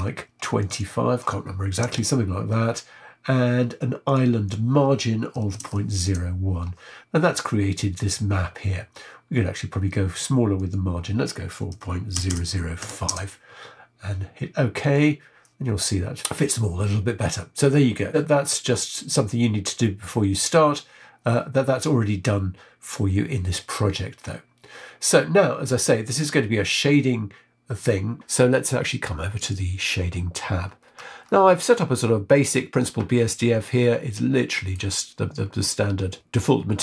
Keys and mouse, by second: 0.9-15.0 drag, 12.2 KP_0, 31.7 middle click, 33.9 middle click.